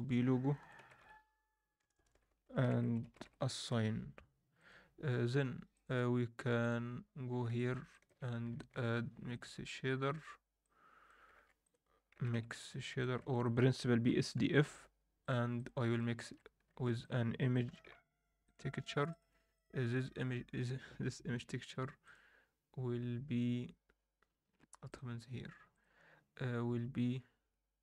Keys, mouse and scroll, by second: 1.9 BackSpace, 4.5 click, 5.7-6.7 drag, 7.2 scroll down 2, 7.5 alt+shift+middle click, 8.2 scroll down 2, 8.5 alt+shift+middle click, 9.3-11.2 drag, 11.3 shift+a, 13.2 shift+a, 15.9 ctrl+shift+right click, 16.7 shift+a, 19.5-22.5 drag, 25.7-26.4 drag.